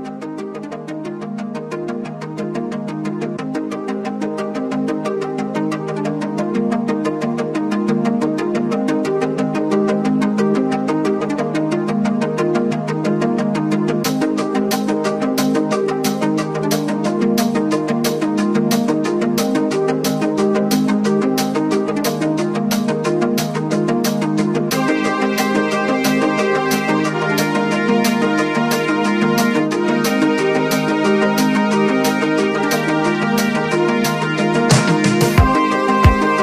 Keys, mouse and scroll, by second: 0.3 ctrl+z, 0.8 click, 2.8 click, 4.2 click, 5.3 click, 6.3 alt+scroll down 1, 6.8 ctrl+scroll down 1, 7.7 alt+scroll down 1, 8.1 click, 9.5 click, 10.5-10.9 alt+scroll up 1, 11.3-16.1 drag, 16.1 click, 17.3 click, 21.8 click, 23.2 click, 24.4 click, 26.1 click, 26.3-26.6 alt+scroll up 1, 27.0 click, 27.0 typing, 28.3 click, 28.4 alt+scroll up 1, 28.4 typing, 29.2-31.0 drag, 31.0 ctrl+z, 31.3-35.3 drag, 35.6 click, 35.9-36.4 scroll up 1.